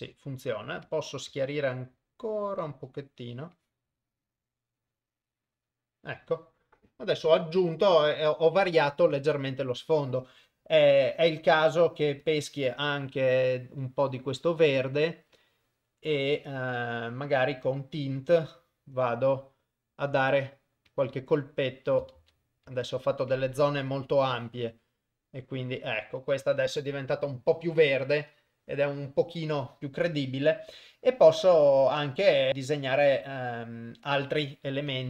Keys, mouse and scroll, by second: 0.9 click, 3.7-5.7 drag, 12.3 click, 14.5 click, 17.7 click, 20.4 click, 21.0 click, 21.5 click, 22.2 ctrl+z, 22.7 ctrl+z, 24.4-27.4 drag, 32.5-34.3 drag.